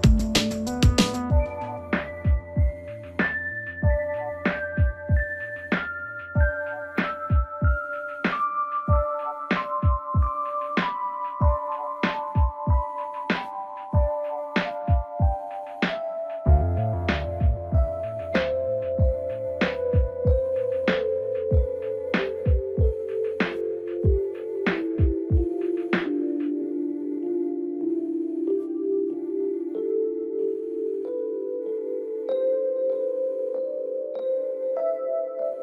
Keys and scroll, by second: 29.4 ctrl+t.